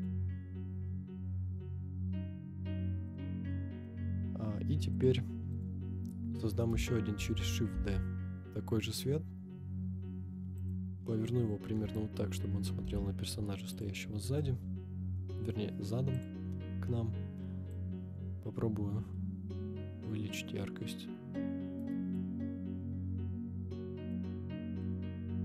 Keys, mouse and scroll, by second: 3.0 click, 3.5-3.8 middle drag, 3.9-4.7 scroll down 2, 4.9-5.7 drag, 4.9-5.3 scroll down 1, 6.0 scroll down 2, 6.4 middle click, 7.2 shift+d, 7.7 r, 7.8 z, 10.7 click, 11.8 KP_7, 12.8 g, 13.9 click, 14.4 KP_0, 16.1 click, 17.7-21.8 drag, 24.1 click, 24.8 click.